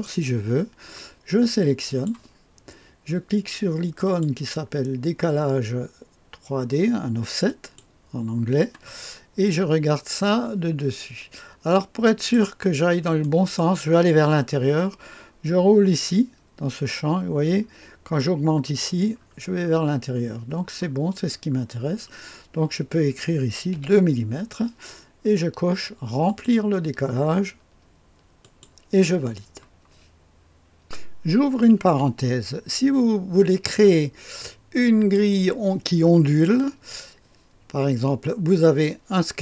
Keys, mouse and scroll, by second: 0.1 click, 1.9 right click, 2.1 click, 4.0 click, 7.5 click, 9.0-9.6 scroll up 1, 9.6-10.2 scroll down 1, 10.2-12.3 drag, 12.7-13.2 scroll up 2, 13.2-14.4 right drag, 15.8-16.8 scroll up 2, 16.8-18.6 scroll up 1, 18.6-20.2 scroll up 1, 20.2 scroll down 2, 20.5 scroll up 2, 20.6-21.2 scroll down 2, 21.2 scroll up 2, 21.6-23.7 scroll down 2, 23.7 KP_2, 26.2 click, 28.4 click, 29.6-30.8 scroll down 1, 33.9-35.1 drag, 38.6 click.